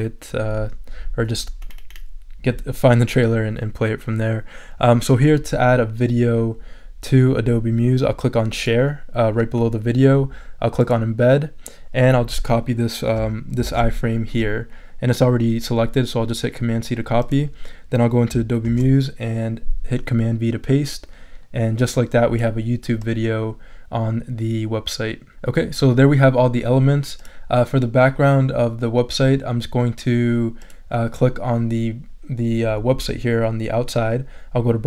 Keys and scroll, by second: 13.6 super+c, 18.6 super+v.